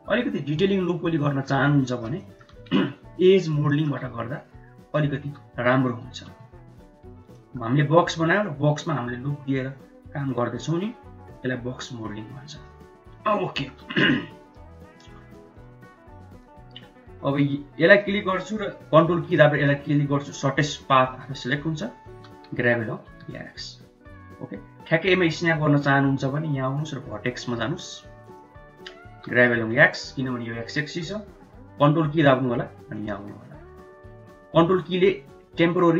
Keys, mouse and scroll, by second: 1.7 middle click, 2.1 shift+middle click, 3.5 shift+middle click, 4.3 ctrl+middle click, 4.7 middle click, 5.1 g, 7.2 middle click, 12.5 middle click, 13.3 shift+middle click, 14.3 click, 16.2 ctrl+click, 17.3 click, 17.8 click, 18.8 ctrl+click, 19.2 middle click, 22.0 g, 27.4-28.5 drag, 29.0 g.